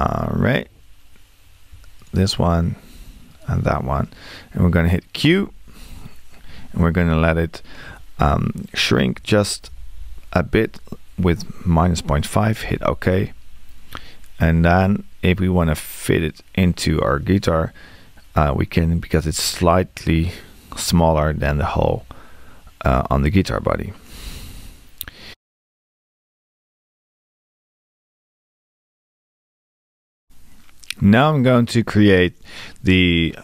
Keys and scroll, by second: 9.2 space, 12.7 Return.